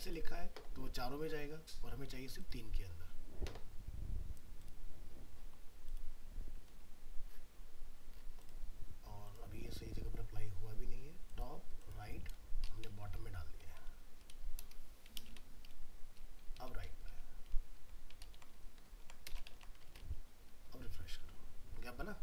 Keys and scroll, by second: 18.2 ctrl+Left, 19.5 ctrl+s, 19.9 alt+Tab.